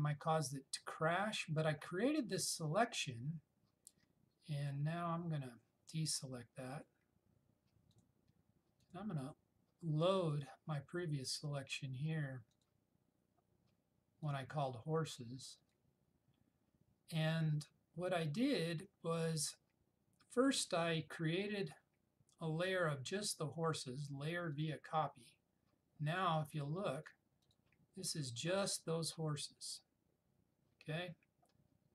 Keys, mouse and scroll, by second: 6.9 click, 21.7 right click, 24.7 click.